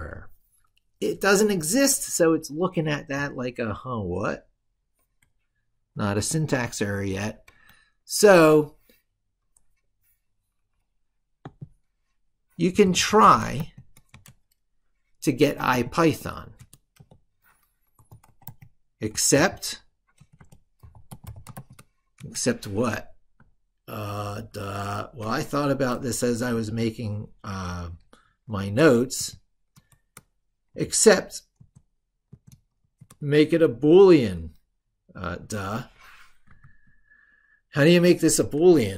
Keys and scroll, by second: 6.4 ctrl+super+Left, 24.3 ctrl+super+Left, 36.4 ctrl+super+Right.